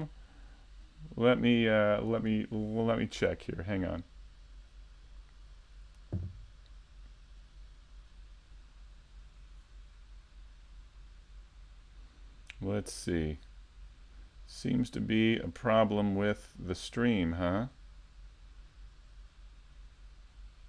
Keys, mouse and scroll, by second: 2.6 click, 3.6 KP_5, 4.0 middle click, 5.6 shift+middle click, 6.0-6.8 scroll down 1, 10.2 middle click, 12.3-12.7 scroll up 1, 12.7 scroll down 1, 13.1 middle click, 16.6 middle click, 20.3 middle click.